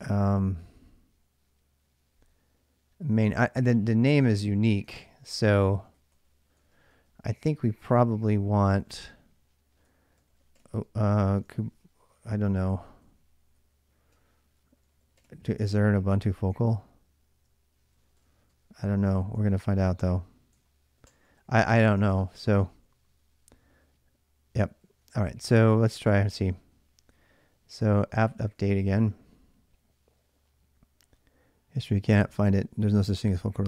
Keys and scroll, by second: 3.9 ctrl+a, 4.6-22.5 typing, 20.4 ctrl+[, 20.4 ctrl+h, 22.5 ctrl+a, 22.7 ctrl+a, 24.6 ctrl+a, 25.2-26.3 typing, 27.4-29.3 typing.